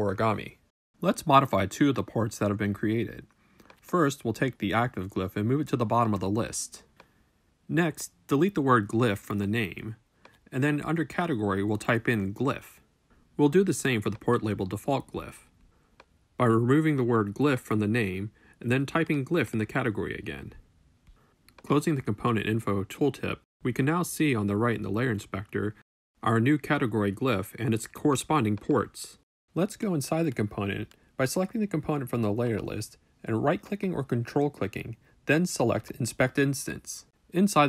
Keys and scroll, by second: 10.7 BackSpace, 12.5-13.8 typing, 18.0 BackSpace, 19.8-20.8 typing.